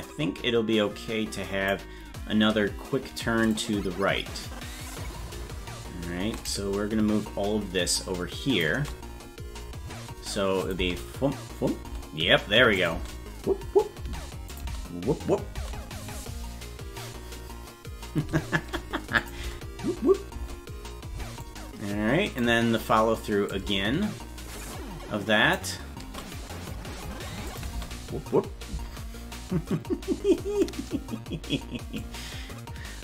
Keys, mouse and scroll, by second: 0.0-1.7 drag, 3.5-4.5 shift+drag, 5.0-10.7 shift+drag, 10.8 space, 11.8 space, 12.8 click, 14.5 click, 14.6 space, 19.2 click, 19.4 space, 21.4 click, 23.5-25.5 drag, 27.5 click, 27.7 space, 32.0-33.0 drag.